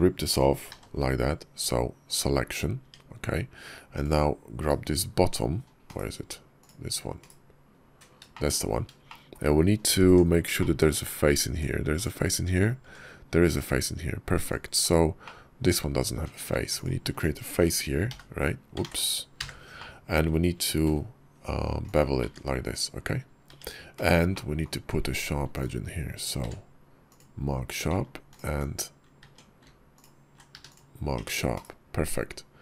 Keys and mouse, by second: 0.5 p, 2.7 Tab, 4.4 /, 5.8 /, 7.0 /, 8.2 shift+click, 8.9 shift+click, 9.9 Tab, 10.4 shift+click, 10.8 middle click, 11.4 Tab, 11.8 click, 12.7 Tab, 13.4 /, 14.2 click, 14.7 /, 15.1 click, 16.0 Tab, 16.6 alt+click, 17.9 h, 18.7 ctrl+z, 19.2 f, 19.6 click, 20.6 ctrl+b, 22.1 Tab, 22.6 /, 23.3 Tab, 23.8 /, 24.2 click, 24.7 Tab, 26.2 q, 28.1 alt+click, 29.1 Tab, 29.8 alt+click, 30.4 q, 31.0 Tab, 31.4 /.